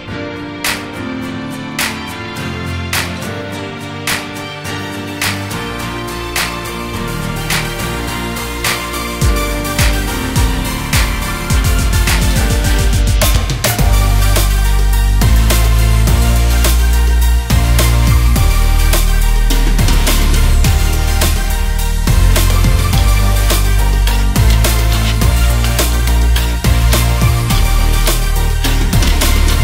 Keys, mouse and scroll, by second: 0.8 click, 1.4 click, 1.8 click, 2.6 click, 3.8 click, 4.4 click, 5.4 click, 6.3-6.7 scroll up 1, 6.7 click, 7.8 click, 9.3 click, 9.9-11.1 drag, 12.5 click, 13.8 click, 15.5 click, 16.0 click, 16.9 scroll down 1, 18.0-18.5 scroll down 9, 18.5 click, 19.2 scroll up 2, 20.2 click, 20.8-22.1 scroll down 1, 22.1 scroll down 1, 22.9 click, 26.5-27.5 scroll up 1, 27.8 click, 28.8 click.